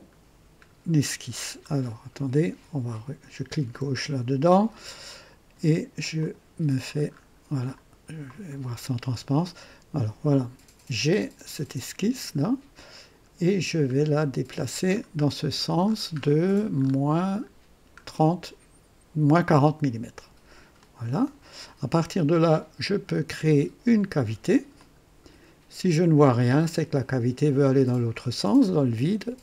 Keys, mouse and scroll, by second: 0.9-1.5 scroll down 3, 3.6 click, 6.1 click, 7.0-7.4 scroll up 2, 7.6-8.3 right drag, 8.5 scroll up 2, 8.9 right click, 12.1 click, 14.1-17.6 scroll down 13, 20.7 click, 24.7 click, 28.0 click.